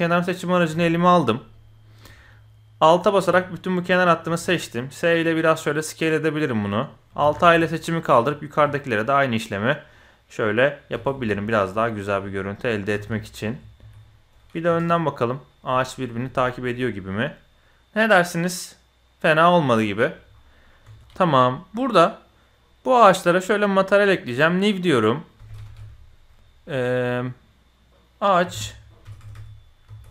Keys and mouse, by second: 0.4 click, 0.8 shift+click, 1.6 click, 2.9 alt+click, 4.3 s, 7.2 alt+a, 8.0 alt+click, 8.5 s, 9.9-10.8 drag, 10.9 alt+a, 11.8 drag, 12.1 s, 12.9 alt+a, 13.8 s, 14.7 KP_1, 15.7 middle click, 16.1 Tab, 16.4-20.1 middle drag, 20.8 Tab, 21.0 ctrl+z, 21.0 alt+a, 22.2 drag, 23.1 click, 25.0-30.1 drag, 29.2 BackSpace, 29.3 BackSpace.